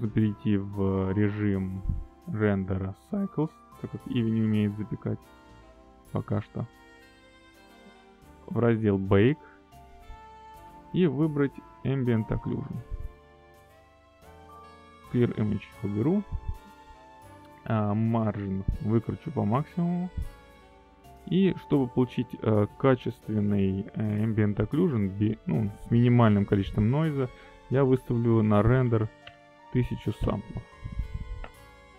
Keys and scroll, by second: 30.2 1, 30.5 0, 31.8 Return.